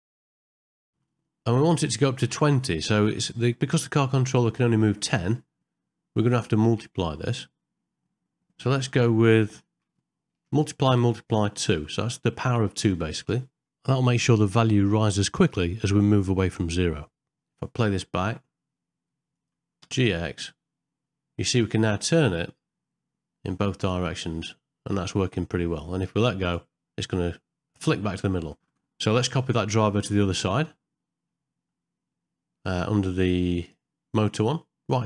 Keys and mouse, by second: 10.8 shift+8, 19.3 click, 33.6 click.